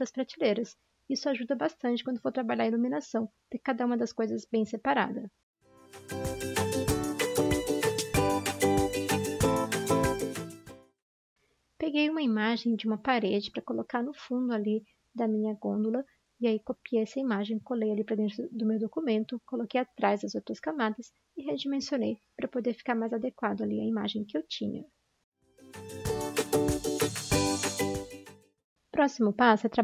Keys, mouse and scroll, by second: 3.4 typing, 5.6-7.1 typing, 8.2-11.1 typing, 12.9 typing, 13.1 ctrl+c, 16.2 ctrl+v, 16.2 ctrl+c, 18.3 ctrl+v, 28.2 ctrl+d, 28.2 ctrl+0, 28.7 ctrl+z.